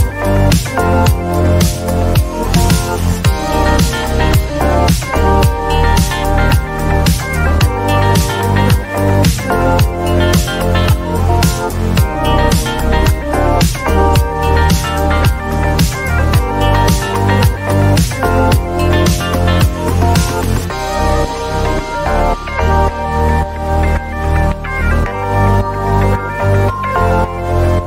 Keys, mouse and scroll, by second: 0.4 click, 3.2 click, 4.3 scroll, 5.1-5.5 scroll, 7.3 shift+click, 7.7-8.2 scroll, 8.9 shift+click, 9.2 click, 9.6 click, 9.7 shift+click, 10.0 click, 10.5 click, 11.2 click, 11.6 click, 11.6 click, 12.1 shift+click, 12.6 click, 14.3 click, 15.4 click, 16.5 click, 18.1-20.0 typing, 24.8 click, 27.3-27.8 drag.